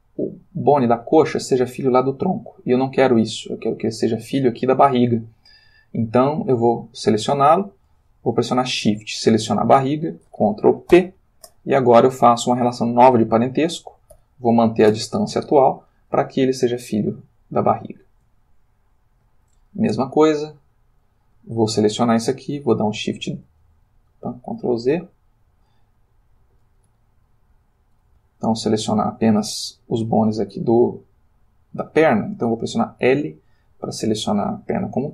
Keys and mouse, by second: 9.5 shift+click, 10.9 ctrl+p, 14.2 Down, 14.8 Return, 16.4-18.3 ctrl+middle drag, 18.4-19.4 ctrl+shift+middle drag, 20.2 shift+click, 20.9 shift+click, 22.6 shift+d, 23.9 Escape, 24.9 ctrl+z, 26.9 g, 27.6 Escape, 28.2 click, 33.0 l.